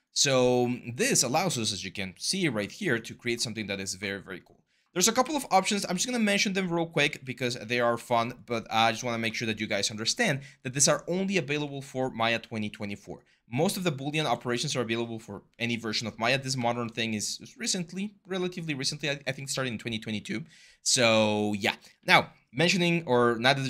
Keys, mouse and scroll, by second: 5.0 w, 5.3 r, 6.8-7.7 typing, 13.9 ctrl+z.